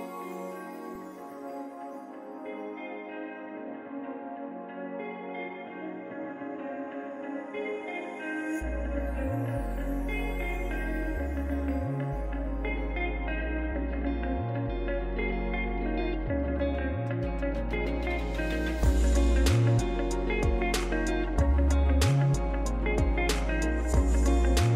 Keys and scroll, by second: 0.0-1.0 typing, 1.3 Down, 1.5 Return, 1.6 Return, 3.2 r, 4.3-5.5 typing, 5.6 Delete, 10.9-12.7 typing, 14.6-18.9 typing, 16.8 Tab.